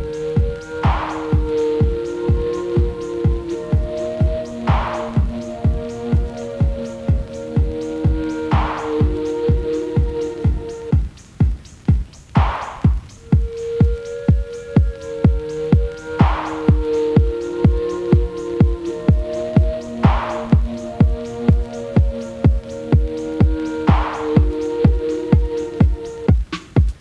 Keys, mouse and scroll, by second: 0.0-0.5 middle drag, 0.5-0.8 scroll down 2, 0.8-1.5 middle drag, 1.5-2.1 scroll up 1, 2.1-3.2 middle drag, 3.2 shift+a, 7.4-8.0 scroll down 1, 8.5 /, 9.6 click, 11.2-11.7 scroll down 2, 12.8 Tab, 13.5 s, 19.2-21.2 drag, 21.9 middle click, 22.5 click, 25.2-25.8 drag, 26.3 click.